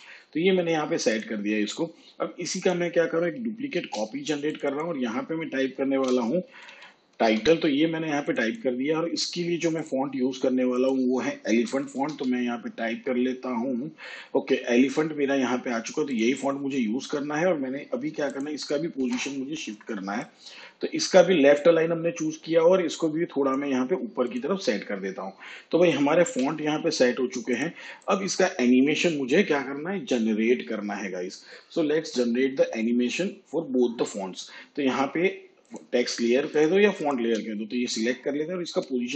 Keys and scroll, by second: 3.7 ctrl+d, 5.8-7.2 typing, 11.6 e, 11.9 l, 12.0 e, 19.0 p, 26.2 v, 38.7 p.